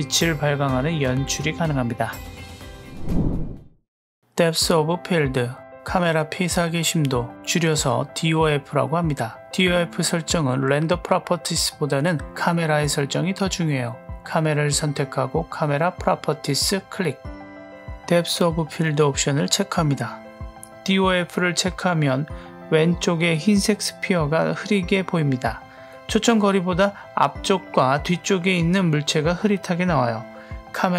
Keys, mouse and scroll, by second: 4.0 click, 5.3 click, 13.6 click, 16.0 click, 18.1 click, 20.0 click.